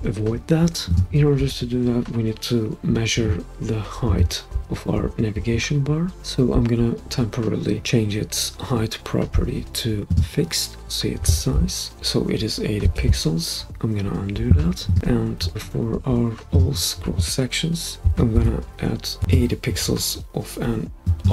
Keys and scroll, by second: 12.8 super+z, 18.1 Left, 18.3 8.